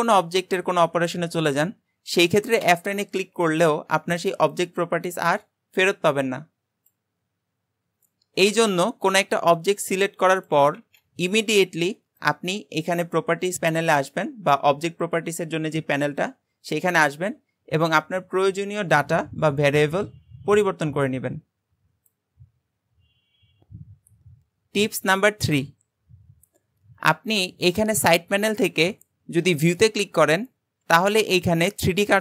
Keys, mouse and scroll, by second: 0.6-2.6 scroll down 1, 2.7 F9, 10.8 shift+a, 18.3-19.0 scroll up 2, 19.0-22.1 drag, 27.9-29.7 drag.